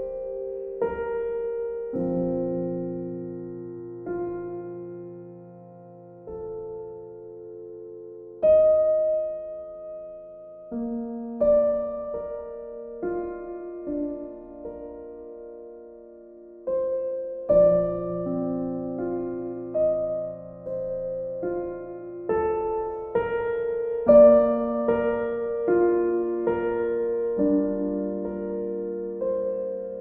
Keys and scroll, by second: 1.7 b, 18.5 shift+F5, 19.0 Return.